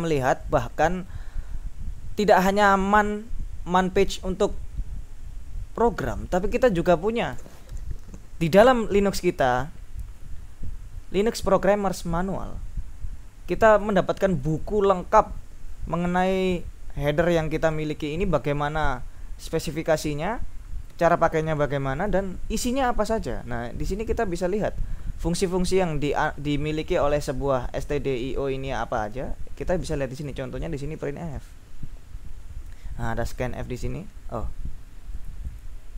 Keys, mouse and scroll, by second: 13.6 click, 14.6 click, 17.1-18.7 drag, 22.1 click, 22.5 click, 22.6-25.2 scroll down 4, 25.9-27.3 drag, 27.8 click, 28.3-30.9 scroll down 5, 31.8-32.4 scroll up 1, 33.3 click, 35.2-35.9 drag.